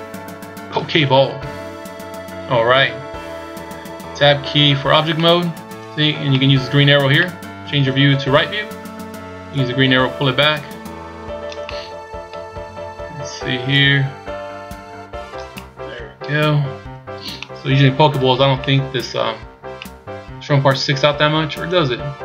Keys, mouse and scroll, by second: 1.3 KP_1, 2.1 scroll down 4, 4.7 Tab, 5.2 middle click, 6.3 middle click, 7.1 middle click, 8.3 KP_3, 9.6 click, 11.6 middle click, 13.8 click, 15.5 middle click, 16.4-16.9 scroll down 2, 16.8 scroll up 3, 17.4 middle click, 18.6 middle click, 19.3-19.9 scroll up 2, 19.7 middle click.